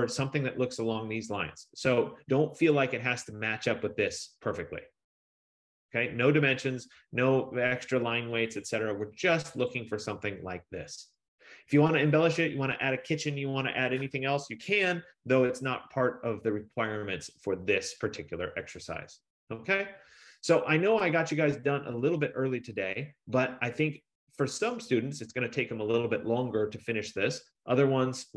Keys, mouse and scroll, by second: 3.1 click, 8.7 F15, 9.9 click.